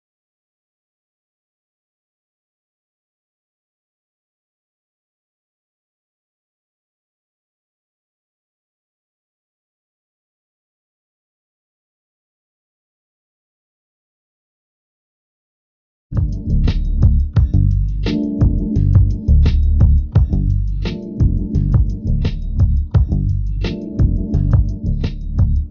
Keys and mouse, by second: 0.0 g, 7.4 g, 12.3 click, 17.7 a, 18.3 b, 19.5 g.